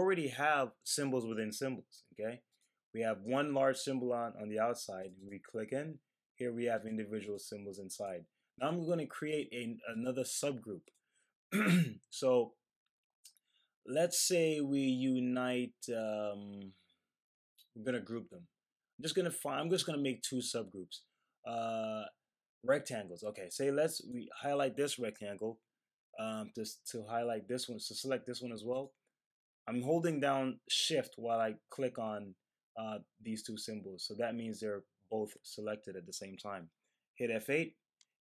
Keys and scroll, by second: 37.4 F8.